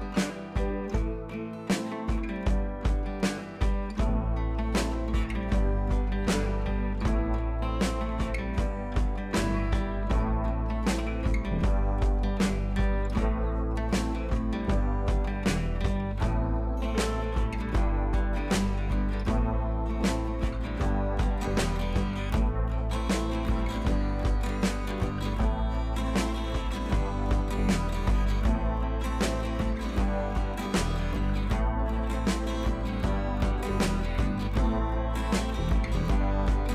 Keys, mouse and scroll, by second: 4.1 click, 5.5 click, 6.2 right click, 6.7 click, 9.5 click, 10.9 click, 13.7 scroll down 1, 14.7 click, 18.2 click, 19.9-20.3 typing, 20.6 Caps_Lock, 24.7 shift+2, 30.4 t, 31.5-32.3 typing, 33.6-36.6 typing.